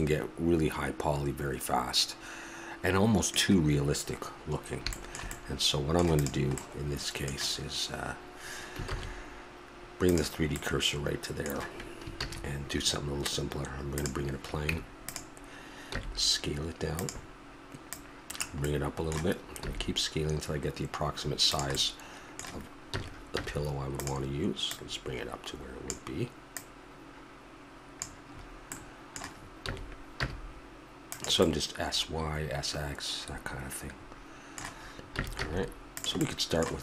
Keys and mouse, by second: 0.3 middle click, 1.5 middle click, 4.5-5.0 middle drag, 5.3 middle click, 6.1-6.7 right drag, 6.7-7.0 middle drag, 8.9 shift+s, 12.2 shift+a, 14.7 Tab, 15.9 s, 18.7 middle click, 19.7 s, 21.8 middle click, 22.9 s, 24.6 click, 26.6 click, 26.8 click, 27.0 click, 28.3 middle click, 29.7 s, 31.7 middle click, 32.7 middle click, 35.1 s, 36.2-36.8 middle drag.